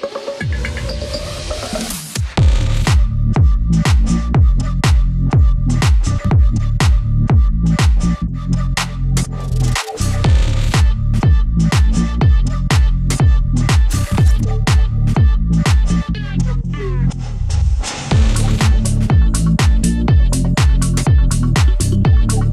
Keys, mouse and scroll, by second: 0.7 scroll down 1, 1.2-3.1 drag, 3.1 ctrl+z, 3.4-7.0 drag, 7.0 scroll up 1, 7.5-12.0 drag, 12.0-13.5 drag, 13.5 scroll down 1, 14.0-16.0 drag, 16.0-16.5 scroll down 1, 16.6 click, 17.0 scroll down 1, 17.4 scroll up 1, 18.0 scroll down 1, 19.3 scroll down 1, 20.2 scroll up 1, 21.1 click, 22.4 ctrl+c.